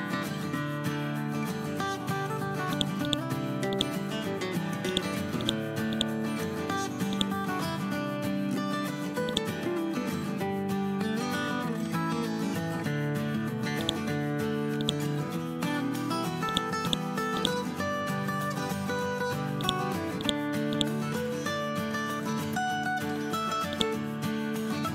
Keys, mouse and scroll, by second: 0.3 ctrl+z, 2.6 click, 4.8 alt+click, 7.5 ctrl+z, 8.1 scroll up 1, 9.2-11.4 shift+drag, 11.7 scroll down 1, 12.5 scroll up 1, 13.7 click, 15.6 ctrl+z, 16.4 click, 19.5 alt+click, 21.9 scroll up 1, 23.7-24.9 shift+drag.